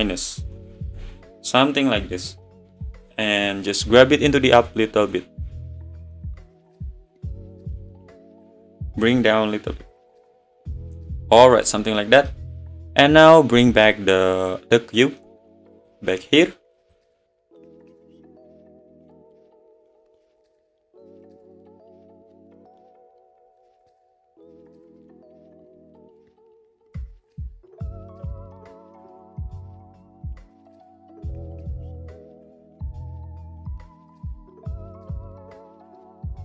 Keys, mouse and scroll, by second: 1.0 `, 2.0 click, 2.3 scroll down 3, 2.5-3.1 middle drag, 3.1 click, 4.5 click, 5.4 `, 7.1 click, 10.8 click, 11.1-11.6 middle drag, 11.6 click, 11.8-12.3 middle drag, 12.3 scroll down 1, 12.4 click, 13.6 click, 15.8-16.9 drag, 17.4 Tab, 17.6 middle click, 17.7 `, 17.8 scroll up 1, 18.0 scroll down 2, 18.2-18.6 scroll up 2, 18.6 s, 19.2 middle click, 20.0 `, 20.6 middle click, 20.9 click, 21.0 `, 21.3 click, 21.6 click, 21.9 ctrl+r, 22.3 click, 22.5 ctrl+r, 23.2 click, 23.4 ctrl+r, 23.8 click, 24.0 ctrl+r, 24.8 click, 25.0 ctrl+r, 25.6 middle click, 25.9 click, 25.9 `, 26.3 click, 26.5 ctrl+r, 27.1 click, 27.3 ctrl+r, 27.9 click, 28.2 ctrl+r, 28.8 click, 29.0 ctrl+r, 30.3 click, 30.5 scroll up 2, 30.7-31.1 scroll down 1, 31.1 ctrl+r, 33.6 click, 33.9 ctrl+r, 34.6 click, 34.8 click, 34.9 click, 35.1 ctrl+r, 35.5 click, 35.7 ctrl+r, 36.3 click.